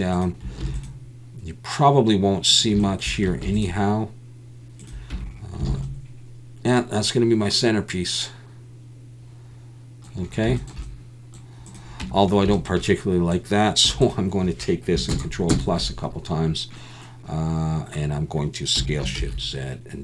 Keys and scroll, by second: 0.6 ctrl+r, 3.4 ctrl+r, 5.1 Tab, 5.7 alt+a, 12.0 Tab, 13.8 3, 15.5 ctrl+KP_Add, 18.7 s, 19.1 shift+z.